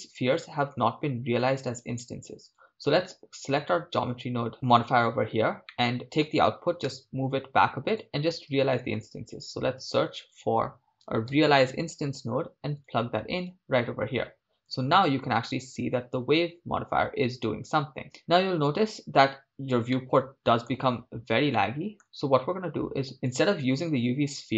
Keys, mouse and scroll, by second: 1.7-4.5 drag, 5.7 middle click, 6.0 click, 6.9 g, 8.5 shift+a, 14.9 shift+space, 18.2 shift+space, 19.9-21.0 middle drag, 21.1 scroll up 2, 21.5-23.2 middle drag.